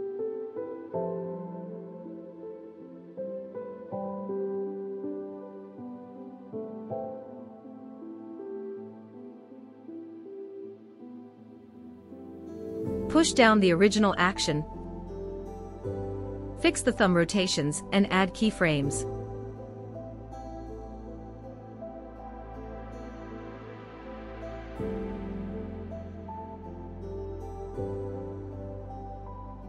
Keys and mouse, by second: 5.6-6.6 drag, 8.5-12.0 drag, 13.8-15.6 drag, 15.6 r, 18.1-18.6 drag, 20.7 KP_Decimal, 22.4-23.5 middle drag, 24.6 r, 28.3 i, 29.5-29.6 shift+drag.